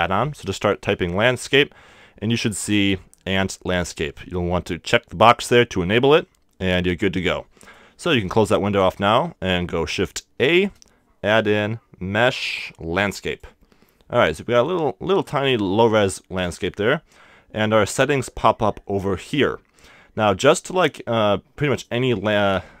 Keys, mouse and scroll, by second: 10.4 shift+a, 14.4-17.1 middle drag, 20.6-22.2 drag, 22.4 click.